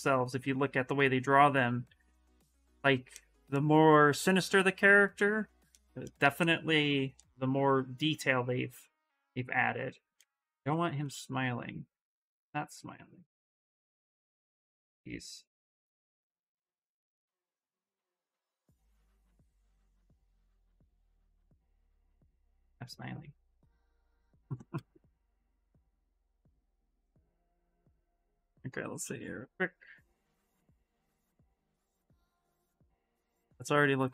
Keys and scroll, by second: 7.3 s, 9.9 ctrl+z, 10.3 ctrl+z, 10.9 s, 17.2 ctrl+z, 17.3 ctrl+z, 17.6 ctrl+z, 17.7 ctrl+z, 17.8 ctrl+z, 18.0 ctrl+z, 18.2 ctrl+z, 19.8 s, 26.4 ctrl+z, 26.6 ctrl+z, 26.7 ctrl+z, 27.0 ctrl+z.